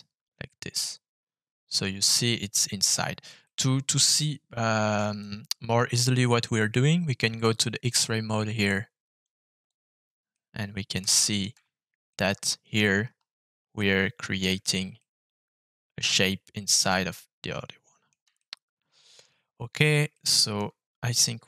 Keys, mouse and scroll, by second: 1.9 click, 3.4 shift+middle click, 5.1 middle click, 9.2 click, 10.3 middle click, 11.1 shift+middle click, 11.5-12.0 scroll up 3, 12.0 middle click, 13.7 shift+middle click, 14.5 scroll up 1, 14.9-18.0 middle drag, 18.3 shift+middle click, 20.1 shift+middle click, 20.8 scroll down 1.